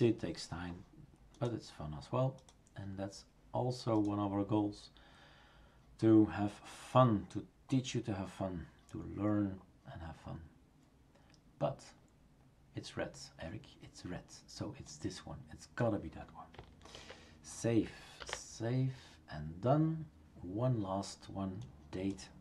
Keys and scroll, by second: 16.9 ctrl+v, 18.2 ctrl+s.